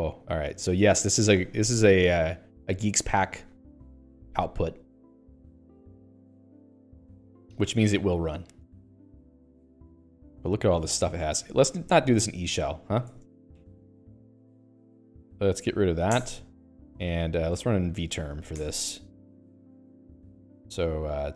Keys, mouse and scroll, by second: 12.0 ctrl+c, 12.4 ctrl+c, 13.3-15.7 typing, 13.5 Return, 16.6 Return, 18.0 alt+x, 18.1-19.2 typing, 19.8 Return.